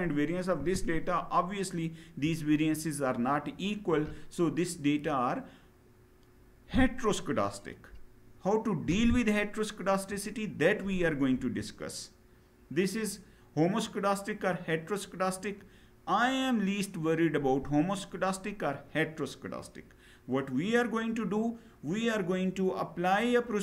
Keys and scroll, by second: 11.0 Down.